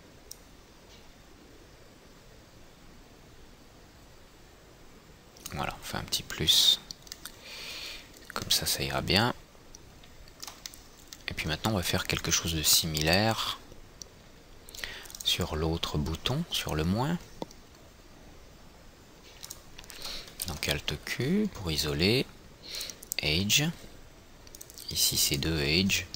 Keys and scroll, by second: 20.6 alt+q.